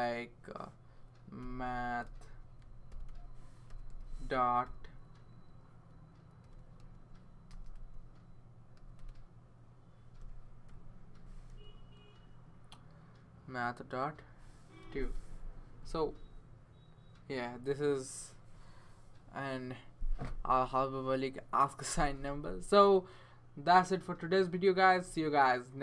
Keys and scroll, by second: 1.1-4.6 typing, 6.2-11.5 typing, 14.8 2.